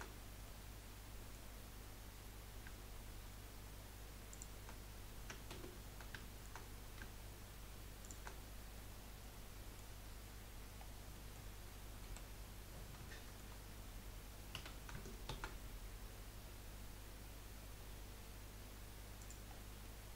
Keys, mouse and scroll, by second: 0.1-0.4 scroll down 3, 0.4-1.5 middle drag, 1.5-2.1 scroll up 2, 4.3 shift+click, 5.5 ctrl+z, 6.3 shift+middle click, 6.6 scroll up 1, 8.0 shift+click, 8.4-8.7 scroll down 3, 8.7-10.0 middle drag, 10.0 scroll up 1, 10.8 scroll down 2, 11.1 middle click, 12.0 KP_1, 13.1 shift+middle click, 13.6 scroll up 2, 14.5 s, 19.5-19.9 scroll down 3, 19.9-20.1 middle drag.